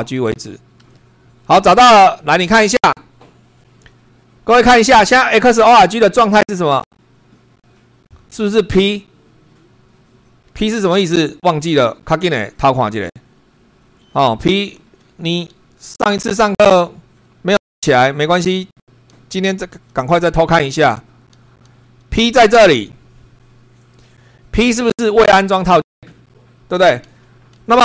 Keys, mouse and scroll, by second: 0.4 n.